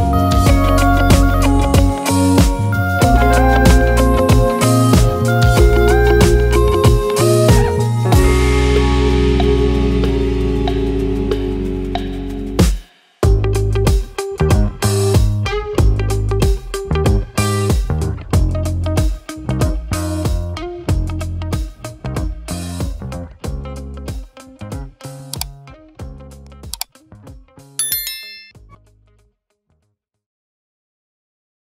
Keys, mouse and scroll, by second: 0.7 r, 4.5 click, 5.4-5.8 middle drag, 5.8 scroll up 1, 6.1 middle click, 6.9-8.5 drag, 8.5-9.8 middle drag, 9.8-10.1 scroll up 1, 10.1-11.1 middle drag, 11.1-13.2 drag, 13.2-13.7 middle drag, 13.7 scroll down 2, 14.0-15.1 middle drag, 15.1 click, 15.8-17.8 drag, 18.4-20.5 drag, 21.0-22.9 middle drag, 22.9 scroll up 2.